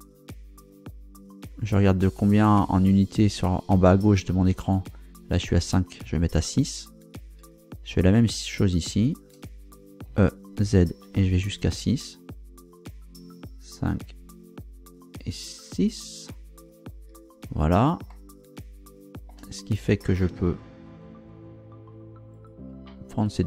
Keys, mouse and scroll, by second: 7.1 ctrl+click, 8.4 right click, 9.0 shift+right click, 10.1 e, 10.6 z, 16.7 ctrl+click, 18.1-19.5 shift+middle drag, 22.3 right click, 23.2 shift+right click.